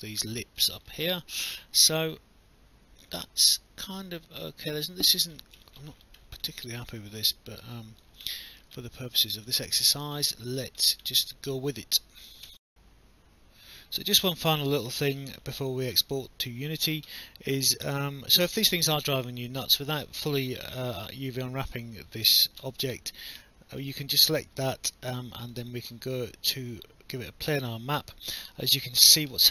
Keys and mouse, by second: 0.8 alt+middle click, 1.1 alt+click, 7.7 alt+click, 8.3 alt+middle click, 12.5 alt+F9, 14.2 alt+click, 16.0 alt+middle click, 16.5 alt+click, 19.8 alt+click, 20.3 alt+middle click, 20.7 alt+click, 21.1 alt+middle click, 23.8 click, 25.5 click, 27.5 click, 28.7 alt+middle click.